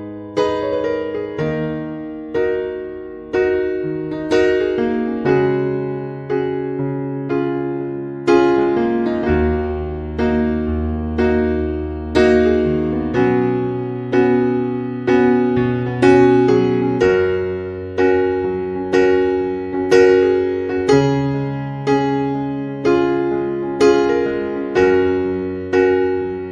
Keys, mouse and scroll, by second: 2.0 click, 4.8 click, 5.9 Tab, 7.3 click, 7.6-8.0 scroll down 1, 8.5 scroll down 23, 8.8-9.6 scroll down 3, 9.3-9.6 scroll up 1, 9.8-10.2 scroll down 3, 10.0 scroll up 1, 10.9 scroll down 1, 15.0 Tab, 16.7 click, 18.3 scroll down 1, 19.8-21.0 scroll up 7, 21.0 click, 22.8-23.4 scroll up 3, 23.4 scroll down 1, 24.7 click.